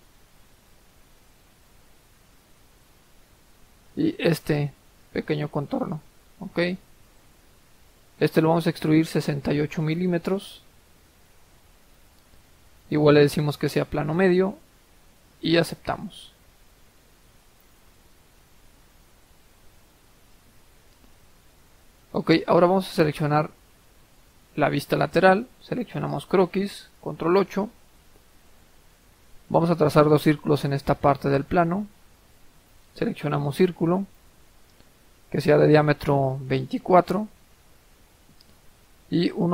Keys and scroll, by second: 11.0 typing, 18.4-19.2 typing, 20.4-21.1 typing, 27.1 ctrl+8, 36.9 typing, 37.7 Return.